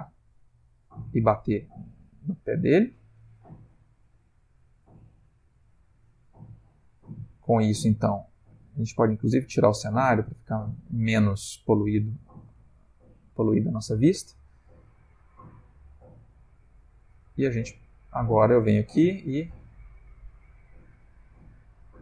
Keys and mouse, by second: 0.5 Left, 0.8 Left, 1.1 Left, 1.2 Left, 1.4 Right, 1.9 Right, 2.4 Right, 4.0 ctrl+middle click, 5.1 shift+middle click, 7.0 click, 7.6 click, 9.6 click, 14.9 s, 17.8 click, 18.4 r, 21.1 click, 21.4 g.